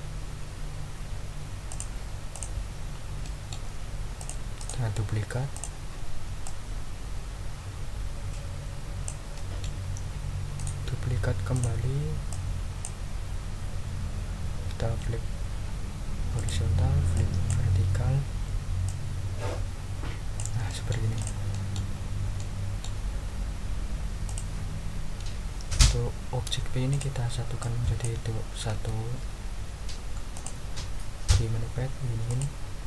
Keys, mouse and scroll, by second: 1.7 click, 2.3 ctrl+click, 2.8 ctrl+scroll up 2, 3.2 ctrl+click, 4.2 click, 4.6 right click, 5.5 click, 6.4-9.2 drag, 9.3 click, 10.5 right click, 11.5 click, 12.3 click, 16.3 click, 17.1 click, 18.8-20.5 drag, 20.7 middle click, 21.2 click, 21.5 ctrl+middle click, 21.9 ctrl+scroll down 1, 22.4 ctrl+click, 24.2 click, 26.9 shift+click, 27.6 shift+click, 28.7 ctrl+z, 30.3 click, 32.3 click.